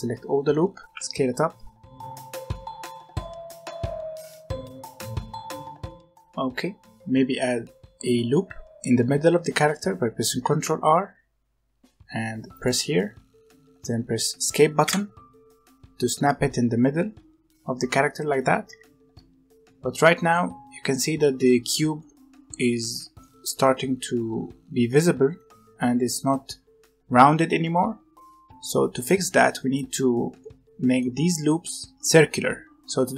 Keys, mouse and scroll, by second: 2.8 scroll down 1, 2.9 middle click, 3.5 s, 4.1 alt+click, 4.2 s, 4.5 scroll down 2, 4.5 middle click, 4.9-5.4 scroll up 1, 5.6 click, 5.8 Tab, 6.0 alt+a, 6.3-9.3 scroll up 1, 10.4 ctrl+r, 16.4-18.6 middle drag, 18.6 1, 19.1-21.7 middle drag, 21.7 scroll up 1, 21.9-24.9 middle drag, 25.0-27.8 middle drag, 28.5 middle click, 28.8 middle click, 29.7 alt+click, 30.4-31.9 middle drag, 31.9 alt+click, 32.2 middle click, 32.7 middle click.